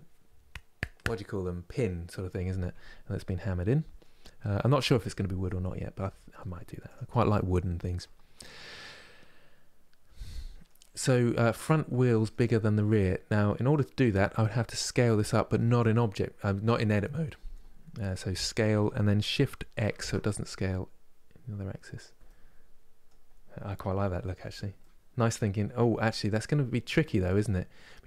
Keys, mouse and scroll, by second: 3.0-4.6 middle drag, 4.6 z, 9.9 middle click, 10.6-11.0 scroll down 2, 11.0-13.3 middle drag, 13.3 click, 13.9-17.0 middle drag, 21.9-22.9 middle drag, 22.9 scroll down 2, 23.3 middle click, 24.1 click, 24.4-28.0 middle drag.